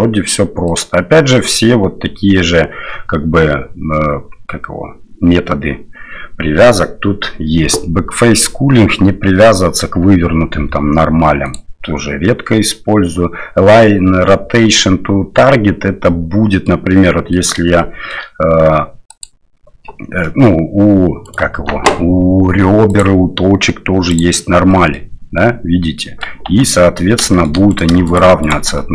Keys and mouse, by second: 0.7-9.7 drag, 11.4-15.4 drag, 16.0-16.7 middle drag, 17.0 middle click, 17.8 shift+middle click, 19.2 click, 20.2 middle click, 21.2 right click, 21.5 Tab, 23.0-24.5 drag, 24.7 middle click, 26.0 middle click, 26.5 Tab, 27.3 shift+middle click, 27.7 right click, 28.1 shift+right click, 28.4 shift+right click, 28.8 middle click.